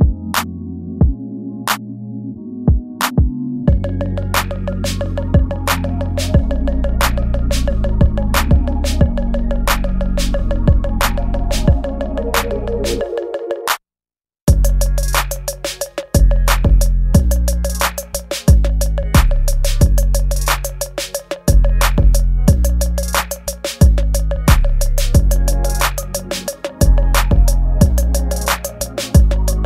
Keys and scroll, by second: 0.8 space, 2.1 space, 2.4 space, 2.9 space, 4.6 ctrl+z, 4.8-6.9 typing, 5.0 ctrl+z, 12.7 space, 13.3 space, 13.6 ctrl+z, 13.7 space, 14.4 ctrl+z, 15.2 ctrl+z, 15.4-17.1 typing, 18.3 ctrl+s, 18.8 space, 19.8 ctrl+s, 21.8 space, 22.4 space, 22.7 space, 22.9 ctrl+z, 24.3 space, 25.6 space, 26.0 space, 27.7 space, 28.0 ctrl+s, 29.2 space.